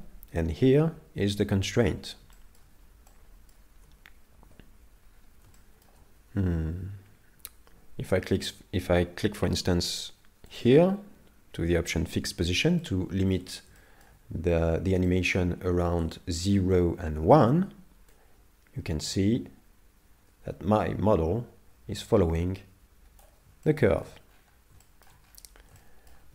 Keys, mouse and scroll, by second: 2.4 shift+middle click, 3.1 middle click, 4.5 KP_7, 5.1-5.5 scroll down 4, 5.6 shift+middle click, 10.5 click, 12.8 shift+middle click, 13.8 shift+middle click, 14.5 scroll down 4, 15.1 shift+middle click, 15.6 scroll up 1, 16.2 shift+middle click, 16.2 scroll up 4, 16.9 scroll down 1, 18.1 click, 23.7 shift+middle click, 24.3-25.4 scroll up 7, 24.8 shift+middle click, 25.8 shift+middle click.